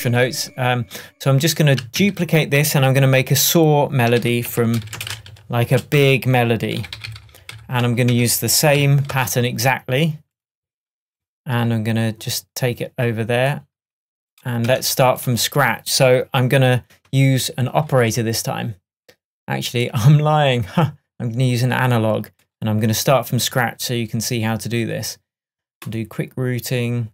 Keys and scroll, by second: 0.0 shift+Tab, 4.5 shift+super+r, 4.6-6.0 typing, 14.7 BackSpace.